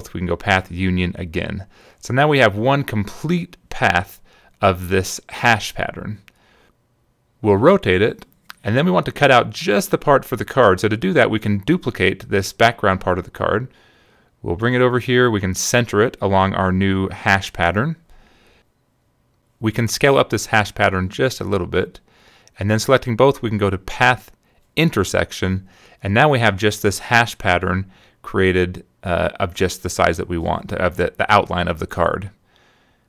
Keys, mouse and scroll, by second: 0.7 click, 3.2 click, 7.6 click, 8.7-11.3 drag, 11.8 click, 12.1 right click, 12.9 click, 13.5-15.2 drag, 15.8 shift+click, 16.4 click, 17.4 click, 17.7 click, 18.3 click, 19.0 -, 19.5 click, 20.7-22.7 shift+drag, 23.3 shift+click, 24.1 click, 26.7 click, 28.2 click, 31.9 click.